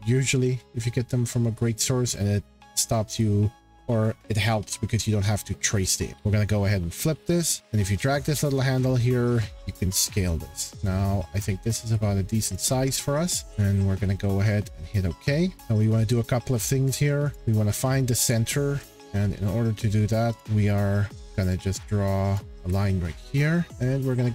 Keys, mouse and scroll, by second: 5.9 click, 6.4 middle click, 7.3 middle click, 7.4 middle click, 7.4 middle click, 12.0 scroll, 12.5 click, 14.6 click, 15.5 scroll, 17.3 click, 17.7 middle click, 18.7-19.3 scroll, 20.4 click, 20.4 scroll, 21.0 scroll, 22.3 click, 22.6 Escape, 23.3-23.7 scroll.